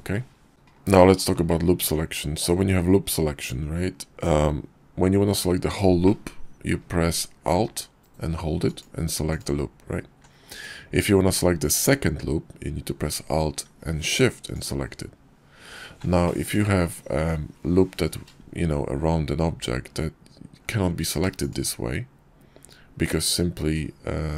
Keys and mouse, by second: 0.8 click, 1.6 Tab, 5.9 middle click, 8.5 alt+click, 14.4 alt+shift+click, 16.1-17.2 middle drag.